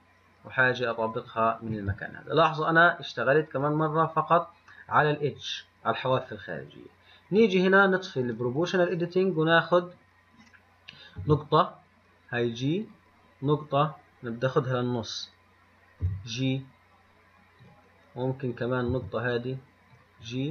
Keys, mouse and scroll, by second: 7.3 scroll up 3, 18.8 click.